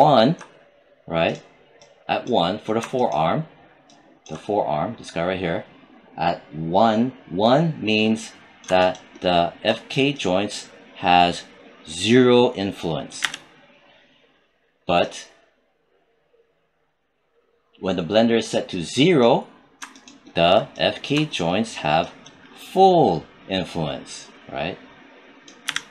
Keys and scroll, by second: 13.1 z, 25.5 z.